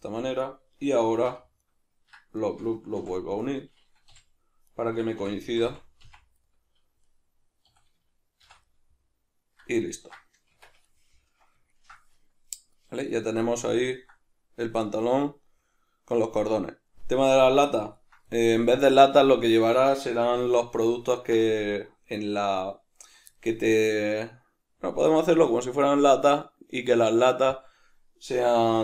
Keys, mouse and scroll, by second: 0.5 click, 1.3 2, 1.6 right click, 2.4 shift+right click, 3.0 f, 3.4 right click, 4.1 g, 4.8 right click, 5.2 f, 6.5-28.8 middle drag, 7.7 a, 8.5 shift+n, 10.5 Tab, 20.4 alt+q, 28.7 shift+c.